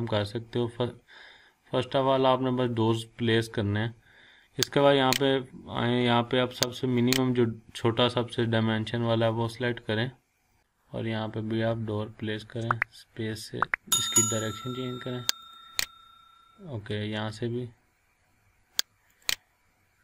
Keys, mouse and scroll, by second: 1.2-3.0 scroll down 1, 4.9 click, 9.4 scroll up 1, 10.6 click, 12.4 space, 15.4 click, 16.9 space, 19.1 click.